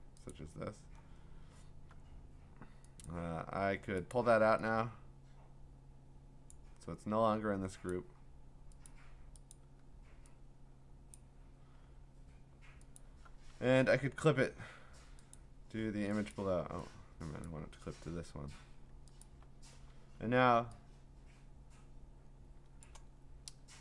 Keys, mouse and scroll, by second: 0.3 click, 3.0 click, 4.1 click, 6.5 click, 7.9 click, 8.9 click, 9.5 click, 11.1 click, 13.0 alt+click, 13.7 v, 15.3 click, 17.4 click, 19.2 alt+click, 20.0-20.5 typing, 22.8 click, 23.2-23.8 scroll.